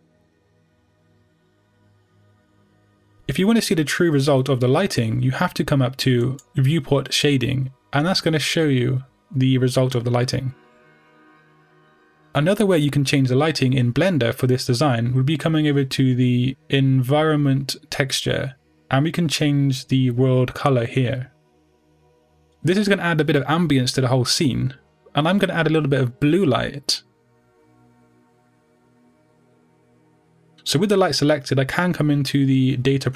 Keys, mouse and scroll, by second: 0.8-1.9 drag, 4.5-8.7 middle drag, 8.7 click, 9.5-16.9 middle drag, 16.9-20.1 drag, 30.6 click.